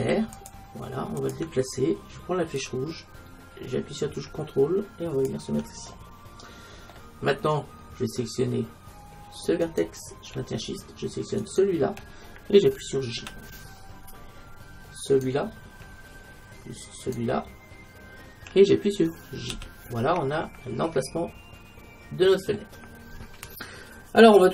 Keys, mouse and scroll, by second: 2.7-4.3 drag, 4.5 click, 10.9-13.4 right drag, 13.2 j, 15.1-16.9 right drag, 17.0-18.8 right drag, 19.5 j, 20.2 middle click, 20.5 middle click.